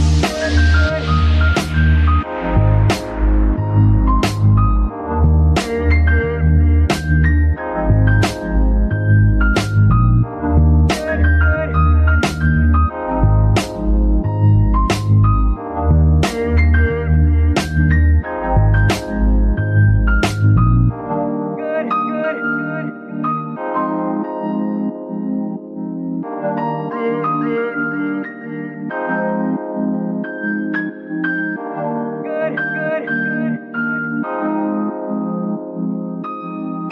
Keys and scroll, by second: 8.8 KP_3, 13.5 g, 14.2 z, 15.3 g, 18.4 g, 20.1 Tab, 20.7 s, 22.1 Tab, 24.3 shift+g, 33.6 shift+s, 35.2 g, 35.3 y.